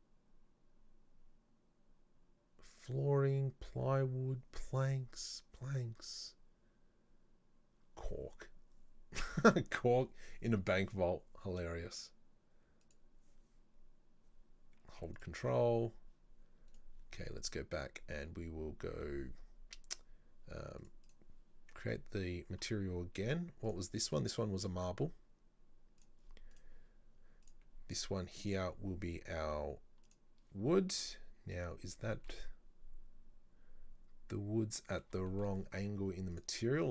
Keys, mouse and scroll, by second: 15.2-16.7 ctrl+drag, 16.7 right click, 17.8 click, 21.1 click, 23.7 click, 24.1 click, 26.6 right click, 27.5 click, 28.5-30.7 drag, 30.7-31.6 shift+middle drag, 31.6-32.1 scroll down 7, 32.1-36.9 shift+middle drag.